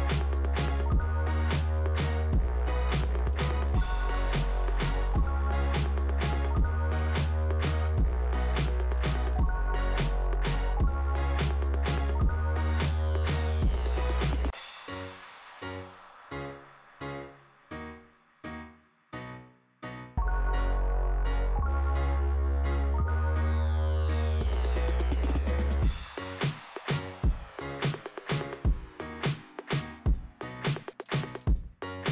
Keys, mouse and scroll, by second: 3.5 click, 4.6 scroll up 1, 5.4-6.6 scroll down 2, 7.2 click, 13.6 click, 13.7 click, 15.7 middle click, 17.4 scroll up 1, 22.1-22.7 scroll down 3, 24.0 scroll up 1, 25.6 scroll down 2, 27.4 scroll up 1, 29.2 scroll down 2, 31.2 scroll up 1.